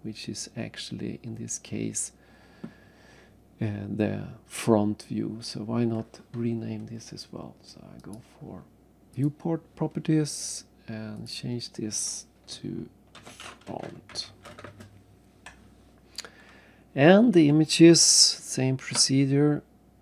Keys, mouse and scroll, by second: 0.0-0.6 scroll up 2, 8.0 click, 9.1 click, 11.1 click, 13.2-14.6 typing, 14.6 Return, 17.9 alt+Tab.